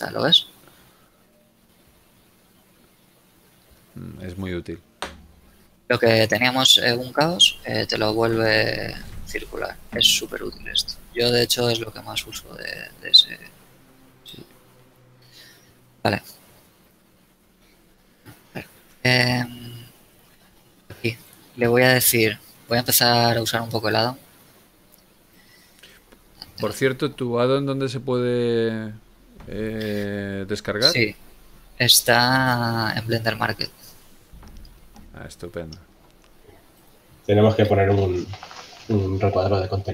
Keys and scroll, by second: 8.1 w, 12.1 r, 12.4 z, 14.4 a.